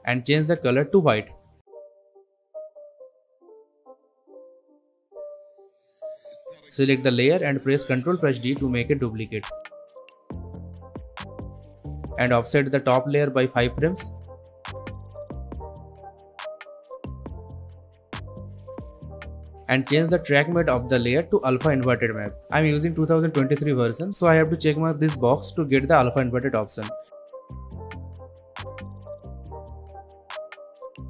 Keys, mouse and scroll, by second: 8.4 ctrl+d, 10.9-11.6 alt+scroll up 1, 11.9-13.7 drag.